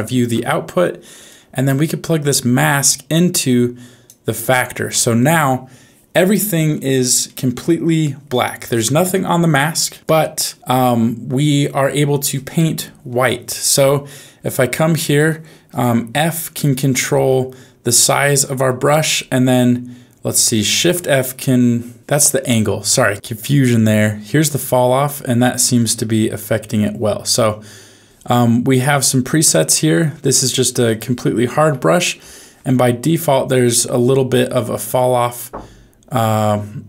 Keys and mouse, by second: 1.2 click, 2.9-4.1 drag, 7.2 middle click, 11.6 middle click, 15.7 f, 18.2 ctrl+f, 20.5 shift+f, 22.0 ctrl+f, 23.1 ctrl+z, 23.1-24.3 drag, 24.4 click, 24.6 click, 25.6 ctrl+z, 26.5-29.9 drag, 30.0 click, 30.3 click, 31.4 ctrl+z, 31.6 ctrl+z, 32.1 ctrl+z, 33.0 click, 34.1 ctrl+z, 34.6-36.8 drag.